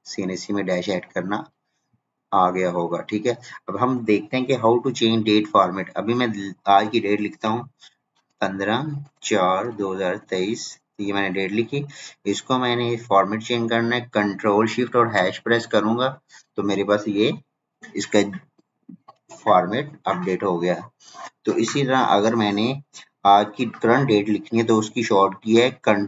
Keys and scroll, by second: 25.8 ctrl+;.